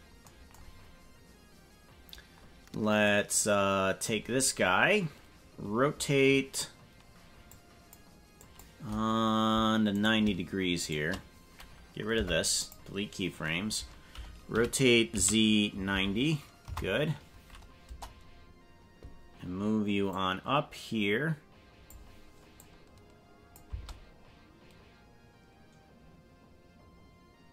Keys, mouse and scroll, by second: 0.6 scroll down 4, 3.1-4.2 drag, 7.6 click, 8.4 click, 9.9 right click, 10.8 shift+right click, 12.1 Delete, 14.7 r, 17.8 KP_0, 20.0-21.8 drag, 22.6-23.6 drag, 23.6 space.